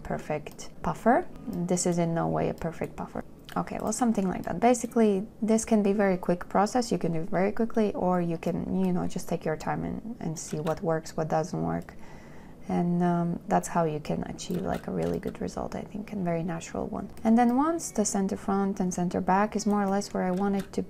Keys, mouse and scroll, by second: 3.2 shift+click, 10.9 space, 15.5 shift+click, 17.1 space, 20.8 space.